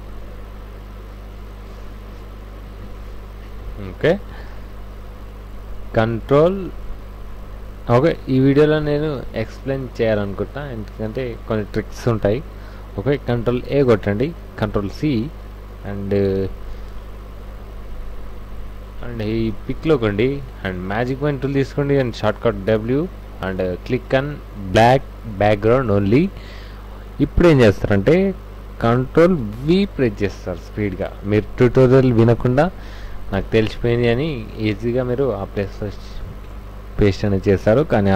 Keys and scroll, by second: 6.1 ctrl+a, 14.5 ctrl+c, 14.7 ctrl+c, 16.4 ctrl+w, 19.4 w, 22.5 w, 29.6 ctrl+v, 33.5 ctrl+alt+z.